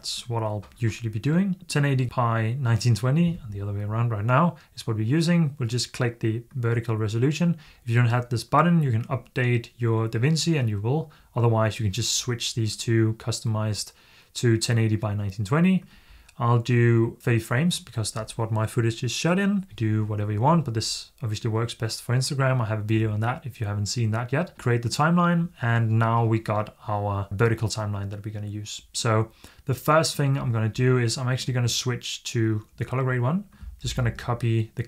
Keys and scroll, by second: 33.7 super+c.